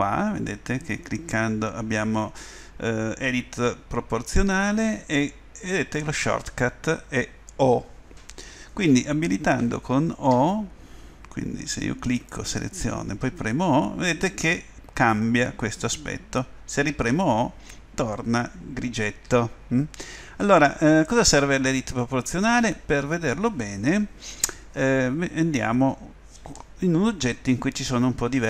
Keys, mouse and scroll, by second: 13.3 o, 16.9 o, 19.2 o, 21.3-26.6 middle drag.